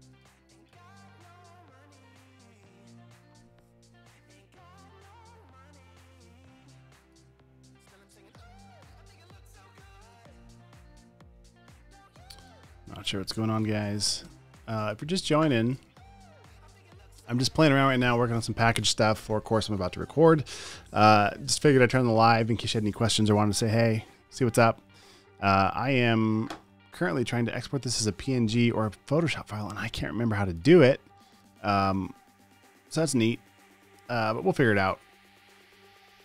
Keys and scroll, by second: 14.4 super+a, 14.5 super+c, 15.5 super+w, 16.0 super+w, 16.6 super+w.